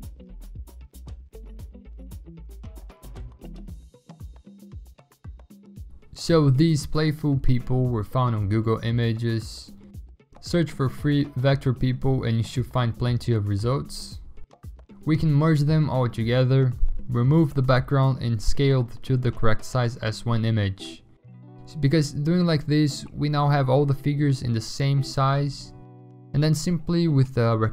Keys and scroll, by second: 8.3 ctrl+g, 9.2 p, 9.3 Return, 12.4 v, 15.0 ctrl+e, 16.5 w, 17.9 ctrl+d, 18.4-20.0 typing, 19.6 Delete, 19.7 ctrl+d, 24.2-25.1 ctrl+t.